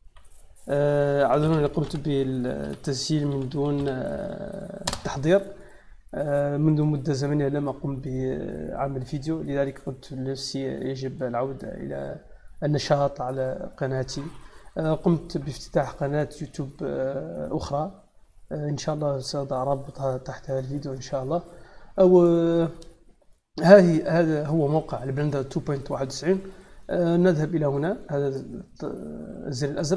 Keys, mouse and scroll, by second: 0.0-2.3 typing, 3.4 r, 4.8 Return, 27.8 z.